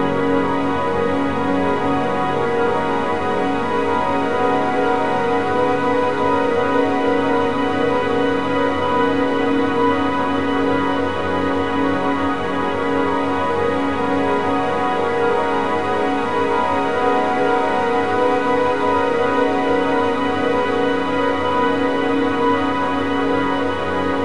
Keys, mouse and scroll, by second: 1.8-4.8 drag, 5.1-8.1 drag, 10.2-11.4 scroll down 5, 11.4 click, 12.0 a, 12.2 a, 14.2-14.8 middle drag, 14.8-15.5 scroll up 8, 15.9-18.7 drag, 18.7 BackSpace, 18.9 BackSpace, 19.2 BackSpace, 21.2 click, 22.0-23.3 drag, 23.3 BackSpace, 23.4 BackSpace.